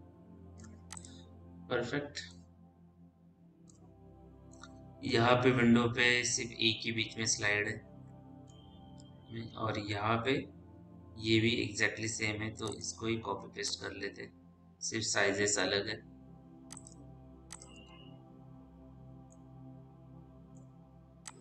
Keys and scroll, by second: 17.7 f.